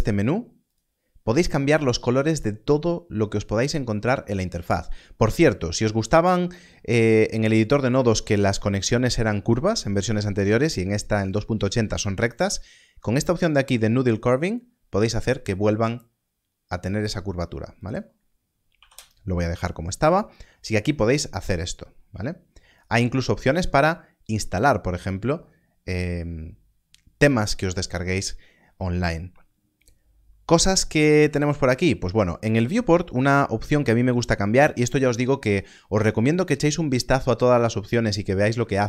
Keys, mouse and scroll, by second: 0.6 click, 1.1-2.8 scroll down 1, 3.0-4.4 scroll up 1, 4.4-7.2 scroll down 1, 15.4 click, 18.7 click, 18.8 Return, 20.3-22.7 scroll up 1, 22.7 click, 29.7 click.